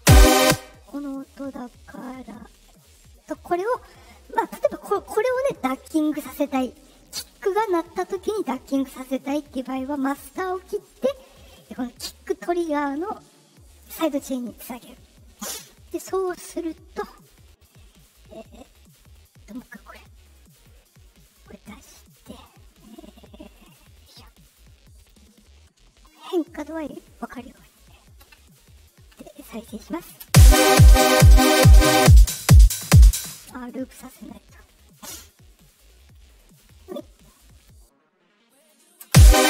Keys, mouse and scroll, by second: 0.3 space, 0.8 click, 3.2 click, 4.5 click, 9.9 click, 13.8 click, 17.5 click, 19.4 click, 20.5 click, 21.6-22.1 drag, 23.6 click, 23.9 click, 24.9 click, 26.0 click, 27.0-27.5 drag, 30.2 space, 33.2 space, 35.9 right click, 37.5 click, 38.5 click, 39.0 space.